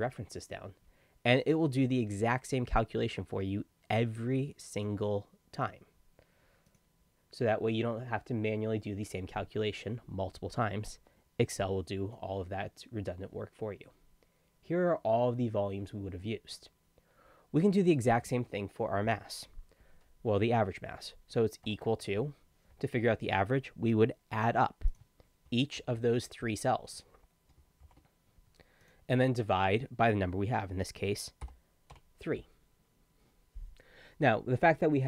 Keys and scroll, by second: 25.8 shift+=, 27.8 shift+=, 31.9 3.